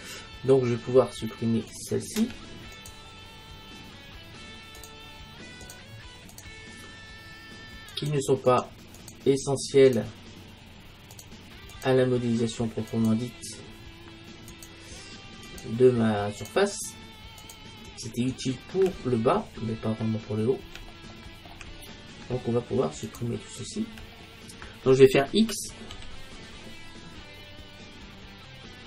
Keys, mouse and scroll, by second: 1.8-4.6 right drag, 4.9-20.3 right drag, 19.1-21.6 middle drag, 23.1-25.4 right drag, 26.0 x, 26.1 middle click.